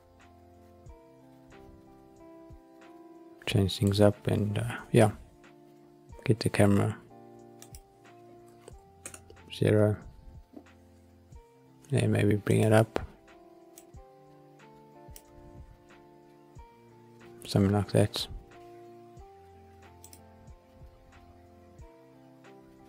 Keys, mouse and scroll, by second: 5.7-6.4 scroll up 1, 6.4 scroll up 1, 7.5 click, 9.0 ctrl+alt+KP_0, 12.5 click, 13.7-15.2 drag, 15.9-16.7 scroll up 1, 16.7-17.4 scroll down 1, 21.3 click.